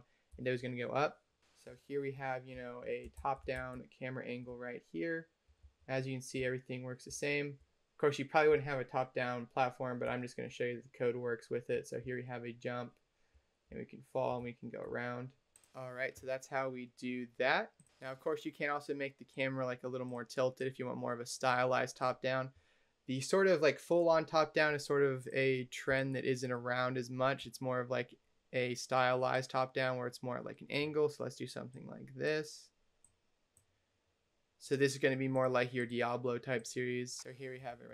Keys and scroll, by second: 0.2-6.9 typing, 8.4 d, 9.9 space, 11.9 a, 13.6 w, 14.3 a, 14.7 d, 36.9-37.9 typing.